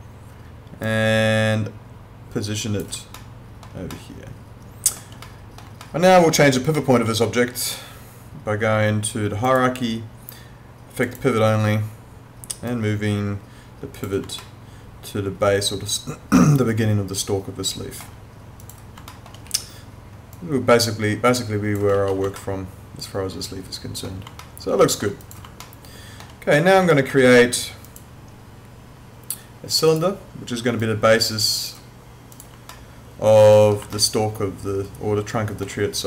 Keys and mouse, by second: 0.9 click, 3.2 alt+middle click, 5.8 alt+middle click, 6.8 alt+middle click, 9.5 click, 14.4 alt+middle click, 18.6 click, 19.1 alt+middle click, 19.5 e, 20.3 click, 22.2 ctrl+z, 22.4 alt+middle click, 24.4 alt+middle click, 25.2 click, 25.6 alt+middle click, 26.9 alt+middle click, 27.9 click, 32.7 alt+middle click, 34.0 alt+middle click.